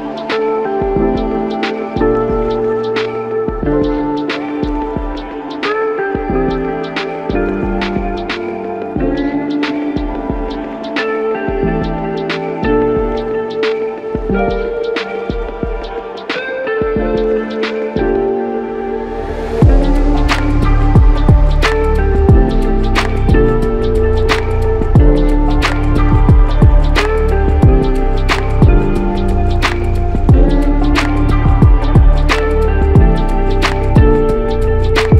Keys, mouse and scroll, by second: 14.6 alt+shift+click, 17.4 alt+click, 18.8 double click, 28.4 double click, 31.8 f.